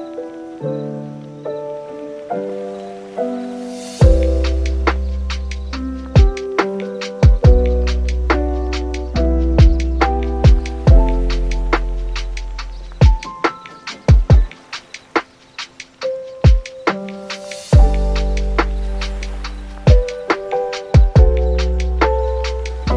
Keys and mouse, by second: 0.0 shift+middle click, 0.4 s, 2.7 click, 3.8 middle click, 4.3 middle click, 6.0 middle click, 6.7 middle click, 7.1 middle click, 7.4 middle click, 7.9 middle click, 8.1 middle click, 8.3 middle click, 8.7 shift+middle click, 9.0 middle click, 9.4 right click, 9.6 shift+middle click, 9.9 s, 11.2 middle click, 11.5 middle click, 12.0 super+s, 12.1 right click, 12.5 middle click, 12.8 shift+middle click, 13.9 right click, 14.1 right click, 14.4 shift+middle click, 14.6 Tab, 15.6-17.5 right drag, 18.9 super+z, 21.2 x, 22.5 click, 22.5 right click.